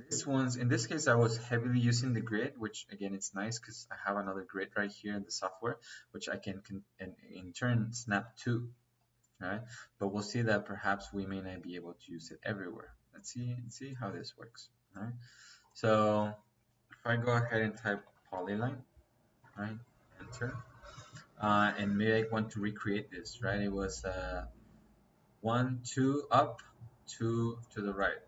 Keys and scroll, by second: 15.7 Escape, 17.9-19.3 typing.